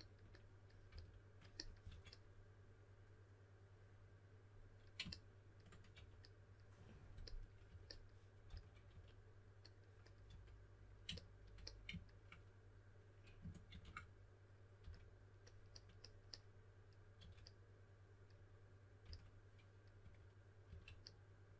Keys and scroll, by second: 0.9-2.3 typing, 5.9 typing, 7.6-8.9 typing, 10.3 typing, 14.8 s, 16.9-17.6 typing, 19.0-20.6 typing.